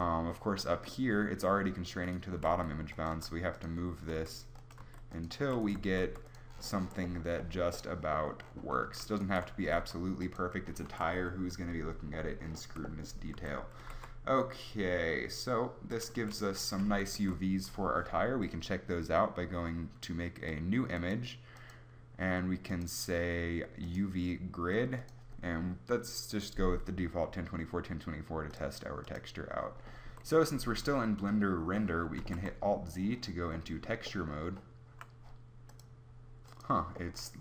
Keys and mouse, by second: 0.7 s, 2.4-6.0 typing, 9.6 g, 11.0 a, 13.3 a, 13.8 g, 16.2 a, 16.8 Tab, 17.1 Tab, 20.9 click, 30.1 Tab, 33.0 alt+z, 35.7 click.